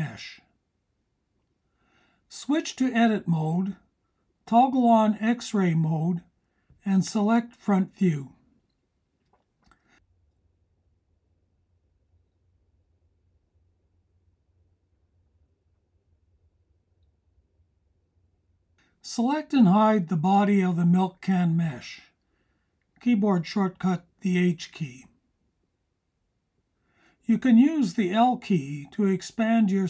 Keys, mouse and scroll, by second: 0.7 click, 7.9-10.8 drag, 14.2 click, 18.1 KP_1, 19.7 click, 21.1-23.0 drag, 24.3 h, 25.8 click, 27.2 l.